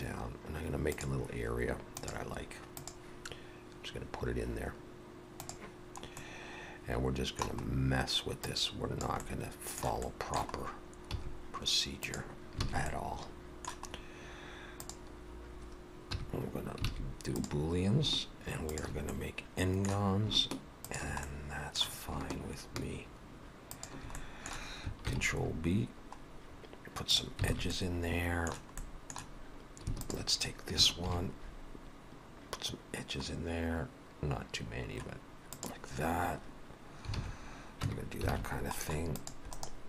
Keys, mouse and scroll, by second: 6.2 middle click, 7.6-8.5 scroll up 2, 8.5 click, 9.2 middle click, 10.1 middle click, 10.6 scroll up 2, 11.1 e, 12.7 alt+a, 12.9 middle click, 13.9 scroll up 1, 14.8 click, 14.8 scroll up 1, 16.2 2, 16.9 alt+a, 17.4 click, 18.7 shift+click, 19.1 middle click, 20.9 shift+click, 21.3 middle click, 23.8 shift+click, 24.2 middle click, 25.2 ctrl+b, 27.5 alt+a, 27.7 middle click, 28.8 middle click, 30.0 alt+shift+click, 31.1 ctrl+b, 37.2 alt+a, 37.9 Tab, 38.3 alt+a, 38.5-38.8 scroll down 2, 39.1 click, 39.6 right click.